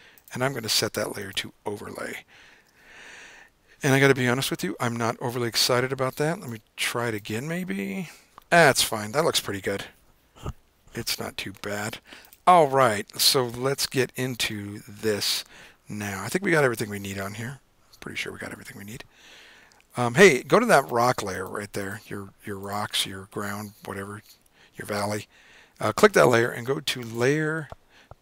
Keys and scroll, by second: 15.4 super+z, 16.2 super+z.